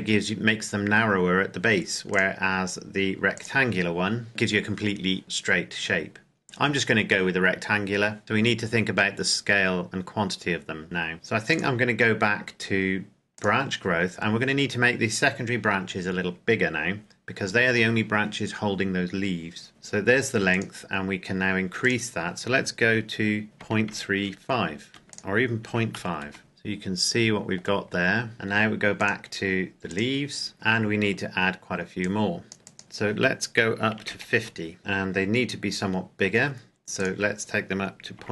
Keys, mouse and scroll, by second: 0.3-2.0 scroll up 1, 2.0 click, 5.4-7.0 scroll up 1, 7.0-7.8 scroll down 1, 7.8-8.2 scroll up 1, 8.2-9.4 scroll down 1, 9.4-10.8 scroll up 1, 11.5 click, 20.4 click, 23.5 KP_Decimal, 23.8 KP_3, 24.1 KP_5, 24.8 KP_Enter, 25.0 click, 25.6 KP_Decimal, 25.9 KP_5, 26.2 KP_Enter, 26.4 middle click, 27.8-28.3 scroll up 1, 28.3 middle click, 28.9 click, 31.9 click, 33.9 KP_5, 34.2 KP_Enter, 34.8 scroll up 1, 36.9 click, 38.1 KP_Decimal.